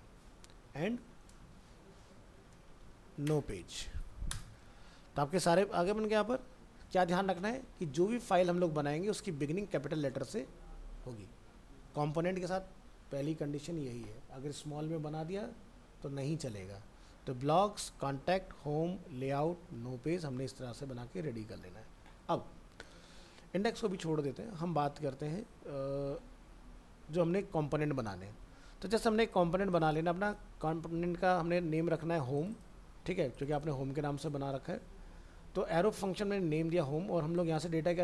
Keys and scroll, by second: 0.5 alt+f, 0.6 alt+释, 19.7 alt+Tab.